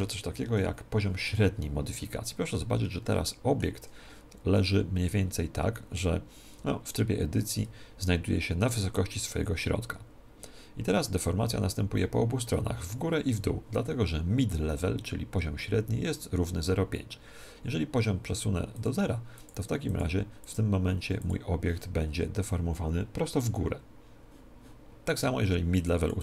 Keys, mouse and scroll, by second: 0.4 KP_1, 1.8-3.2 scroll up 1, 3.2-5.1 middle drag, 6.5 Tab, 10.9 Tab, 18.7-23.0 drag, 25.7-26.2 drag.